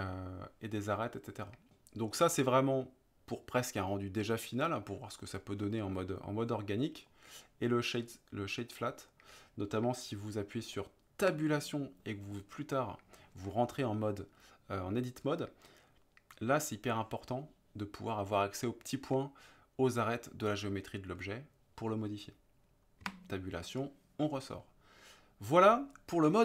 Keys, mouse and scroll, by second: 2.1-5.0 right drag, 7.0-8.9 right drag, 11.3 Tab, 23.0 Tab.